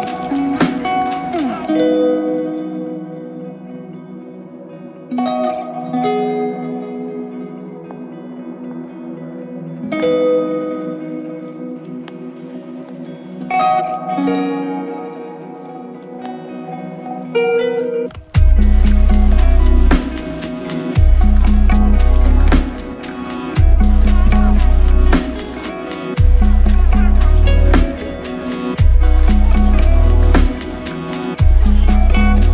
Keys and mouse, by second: 0.7 ctrl+click, 7.0-7.8 typing, 9.7 double click, 14.5 ctrl+click, 15.9 shift+click, 17.8 shift+click, 17.9 ctrl+click, 18.8 ctrl+l, 28.0 shift+click, 28.9 shift+click.